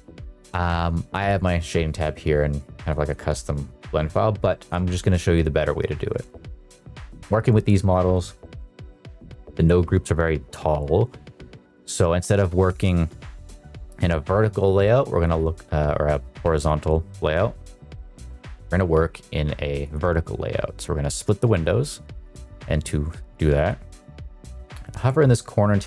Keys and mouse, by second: 2.8 click, 4.0 click, 6.3 shift+middle drag, 15.3-16.3 drag, 16.3 Escape, 18.5 click, 19.8-21.8 drag, 23.3 click.